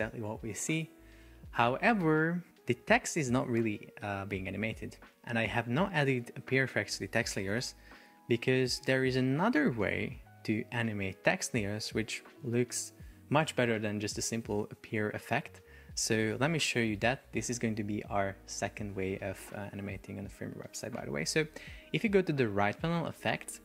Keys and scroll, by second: 2.9 super+r, 7.8 super+r.